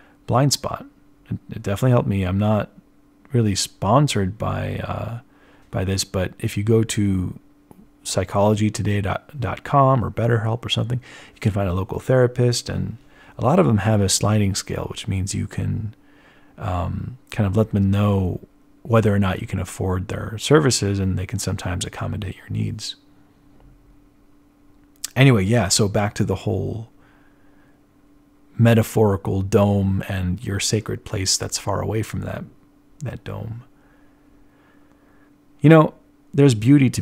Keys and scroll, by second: 2.7 z, 4.1-6.0 typing, 10.1-11.3 typing, 13.3-16.1 typing, 16.4 ctrl+alt+1, 16.6 ctrl+alt+1, 23.0 z.